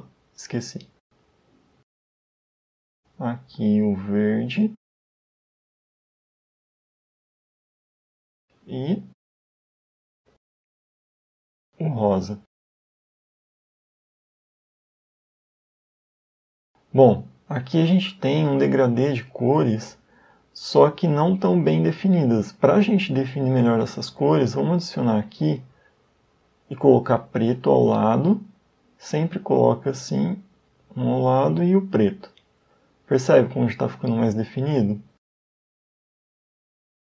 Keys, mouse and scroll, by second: 0.9 click, 3.9 click, 4.5 click, 10.0 click, 10.8 click, 14.9 click, 21.2 click, 22.9 click, 26.0 click, 28.3 click, 29.9 click, 31.3 click, 34.1 click, 34.8 click, 36.1 click.